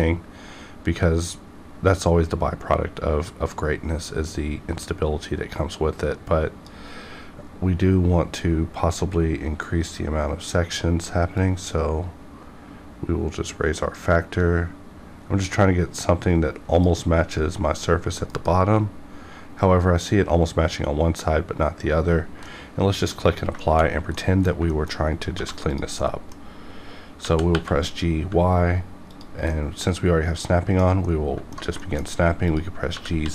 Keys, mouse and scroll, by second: 11.6-18.2 drag, 18.2 F9, 22.4 F9, 22.5 middle click, 23.8 scroll up 1, 24.1 middle click, 24.7 shift+middle click, 25.1 scroll up 1, 25.3 1, 25.6 click, 25.8 click, 26.0 middle click, 26.4 scroll up 1, 27.2 g, 27.4 y, 29.1 ctrl+click, 29.5-31.8 middle drag, 31.8 shift+middle click, 32.0 scroll up 1, 32.4 click, 32.5 click, 33.1 g.